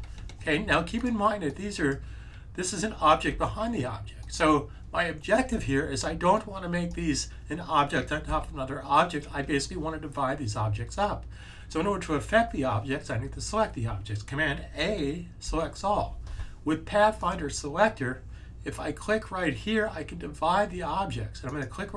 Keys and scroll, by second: 3.2 super+z, 8.2 z, 15.3 super+a.